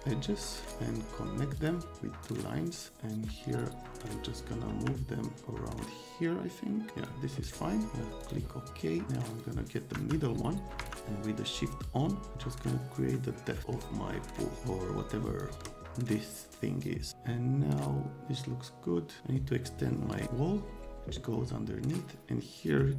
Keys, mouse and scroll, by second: 0.3 middle click, 0.6 right click, 1.5 click, 2.3 click, 3.6 click, 3.8-7.0 middle drag, 4.0-4.7 scroll up 1, 4.7 F3, 8.2 middle click, 9.3 middle click, 10.0 F3, 10.8 F3, 11.8-13.0 shift+middle drag, 13.0-15.4 shift+drag.